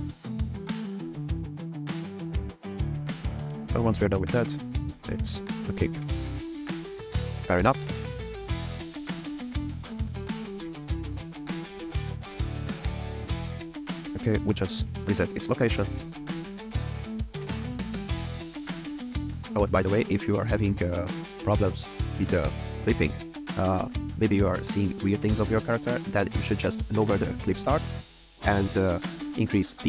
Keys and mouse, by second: 0.4 click, 0.7 alt+click, 1.1 click, 2.0 click, 2.7 click, 3.3 r, 3.4 z, 4.9 r, 5.0 z, 5.6 right click, 6.2 click, 6.4 middle drag, 6.6 r, 6.7 z, 8.0 click, 8.1-8.4 middle drag, 8.4 r, 13.2 click, 13.6 a, 14.1 alt+r, 14.3 alt+g, 20.7 click, 21.0 click, 21.8 click.